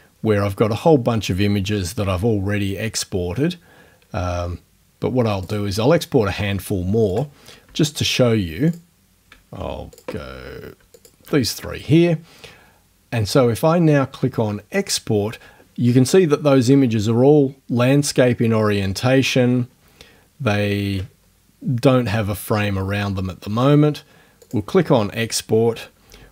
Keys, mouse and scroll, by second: 5.4 click, 7.1 click, 8.7 shift+click, 10.0 click, 11.0 shift+click, 21.2 ctrl+middle click, 24.4 click, 26.2 alt+Tab.